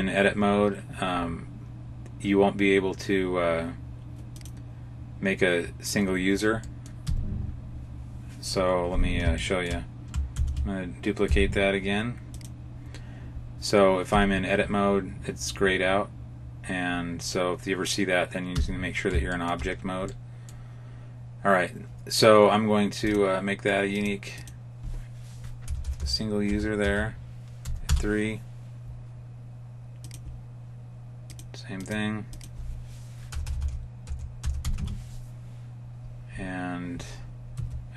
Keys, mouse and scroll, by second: 4.2 click, 6.5 middle click, 6.9 Tab, 7.3 scroll down 1, 9.3 shift+middle click, 10.2 shift+d, 14.0 Tab, 18.4 Tab, 19.2 shift+middle click, 20.0 middle click, 23.0 click, 23.8 click, 25.7 BackSpace, 25.8 BackSpace, 29.9 click, 31.2 click, 31.7 click, 33.4 BackSpace, 33.5 BackSpace, 37.4 Tab.